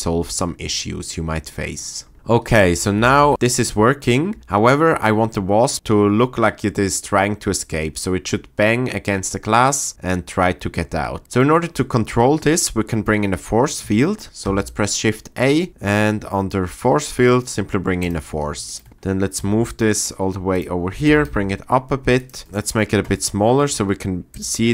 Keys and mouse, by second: 2.1 space, 3.2 shift+Left, 3.3 space, 4.4 space, 14.4 shift+a, 19.4 g, 19.7 click, 20.5 click, 21.0 g, 21.2 z, 24.3 click.